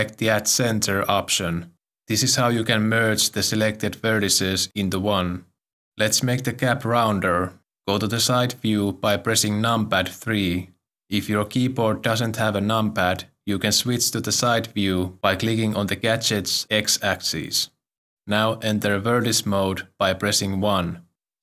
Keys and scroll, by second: 10.0 m, 12.0 3, 20.7 1.